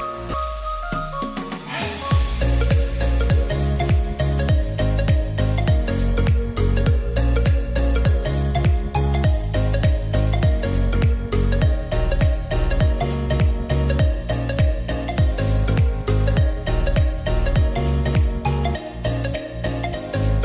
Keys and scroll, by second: 4.8-6.7 typing.